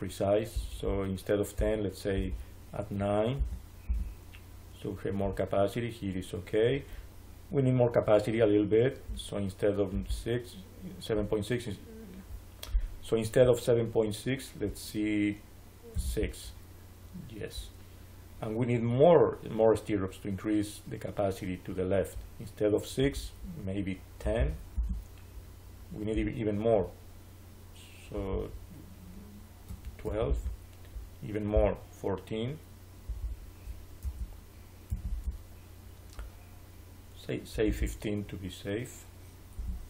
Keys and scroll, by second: 3.3 9, 3.8 Return, 15.8 6, 15.9 Return, 23.9-24.8 typing, 29.6 1, 29.9 2, 30.2 Return, 33.9 1, 34.8 4, 35.0 Return, 39.4 BackSpace.